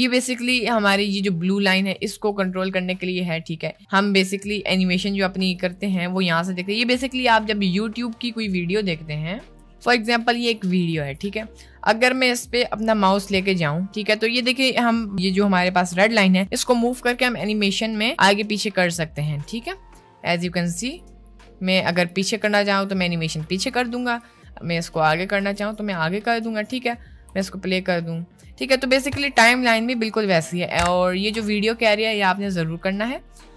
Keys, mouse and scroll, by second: 0.5 click, 2.3 click, 4.4-7.0 drag.